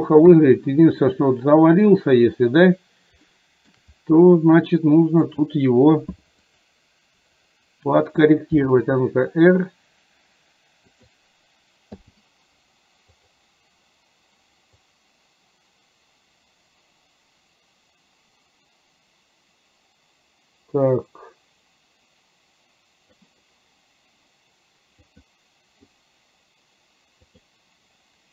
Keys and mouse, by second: 0.3 KP_3, 3.3 shift+middle click, 5.3 click, 6.4 click, 8.7 r, 13.2 click, 14.8-23.3 drag, 25.1 click, 27.4 click.